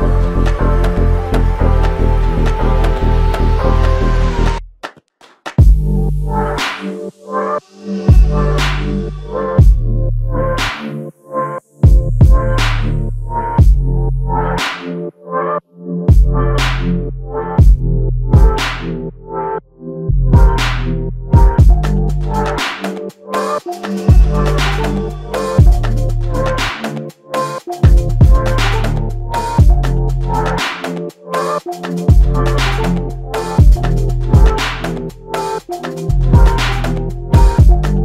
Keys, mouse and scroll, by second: 1.3 double click, 2.3 shift+click, 2.5 shift+double click, 3.1 shift+click, 4.0 shift+click, 4.0 alt+click, 6.6 ctrl+alt+click, 8.0 alt+shift+click, 14.8 double click, 17.2 shift+click, 19.7 alt+click, 23.2 double click, 29.4 alt+click, 30.8 shift+click, 30.8 shift+click, 34.0 double click, 34.0 double click, 35.5 alt+click, 37.2 ctrl+alt+click, 37.2 ctrl+alt+click.